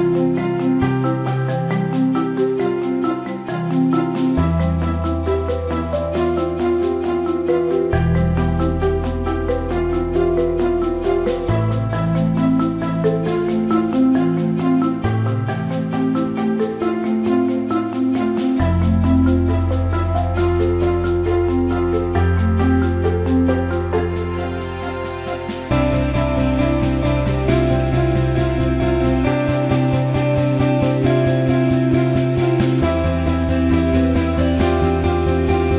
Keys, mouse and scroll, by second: 1.5 click, 4.9-6.5 drag, 8.8-10.9 drag, 12.6-13.0 drag, 13.6 alt+middle click, 14.3-15.8 drag, 16.0 alt+middle click, 17.0 click, 17.7 alt+middle click, 18.7 click, 19.6-21.7 alt+middle drag, 23.3-26.1 alt+middle drag, 26.7 shift+click, 28.2 click, 29.2 click, 29.5 middle click, 30.6 alt+middle click, 31.8 click, 33.5-33.9 drag, 35.1 click, 35.3-35.7 drag.